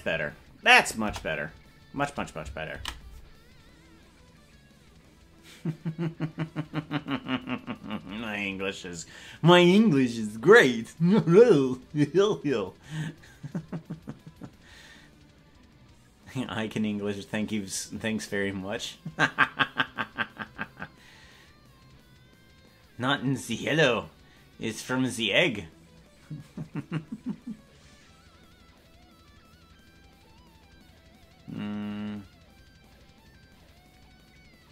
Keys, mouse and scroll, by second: 1.0 KP_0.